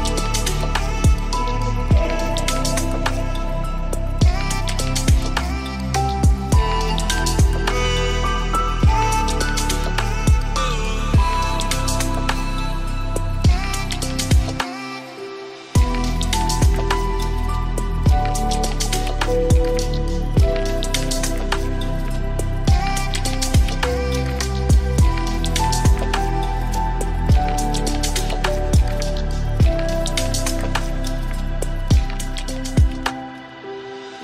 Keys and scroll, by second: 6.7 ctrl+alt+s, 15.7 ctrl+alt+s, 25.7 ctrl+alt+s.